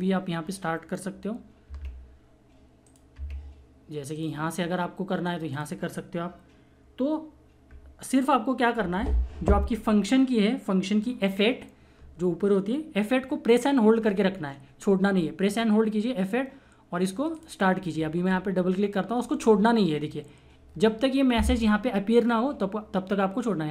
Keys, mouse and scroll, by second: 2.8 click, 4.1 click, 15.1 F8, 17.3 click, 17.5 F8.